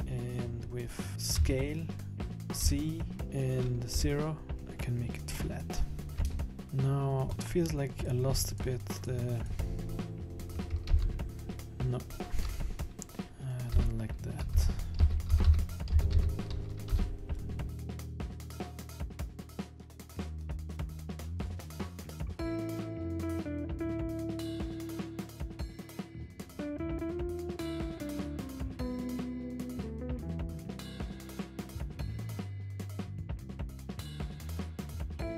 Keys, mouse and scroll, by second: 1.5 s, 5.1-5.4 scroll down 2, 5.4 middle click, 6.3 Tab, 6.6 middle click, 6.6-6.9 scroll up 3, 7.3 middle click, 8.0 right click, 8.5 shift+right click, 10.9 ctrl+z, 13.7-16.9 typing, 18.4 b, 18.7 b, 19.0 b, 19.2 s, 19.9 scroll down 2, 20.0 Tab, 20.0 middle click, 20.1 middle click, 20.4 Tab, 20.7 middle click, 21.0 KP_1, 21.0 scroll down 7, 21.1 middle click, 21.2 scroll up 4, 21.3 KP_7, 21.4 scroll down 2, 21.5 scroll up 1, 22.1 scroll down 1, 22.2 scroll up 1, 22.4 scroll down 2, 22.4 scroll up 3, 22.6 scroll down 2, 23.2-28.2 typing, 24.8 ctrl+z, 26.2 scroll up 1, 26.2 scroll down 1, 29.8 scroll up 2, 29.9 scroll down 1, 30.1 scroll down 5, 30.1-32.3 typing, 30.4 Escape, 30.5 scroll up 4, 30.6 middle click, 30.7 middle click, 30.8 scroll down 1, 30.9 middle click, 30.9 scroll up 1, 31.0 scroll down 8, 31.9 scroll up 1, 32.5 scroll down 1, 32.6 scroll up 4, 32.6 scroll down 3, 32.7-33.5 scroll up 4, 32.8 middle click, 33.3 middle click, 33.5 click, 33.6 middle click, 33.8 middle click, 34.2 s, 35.1 middle click.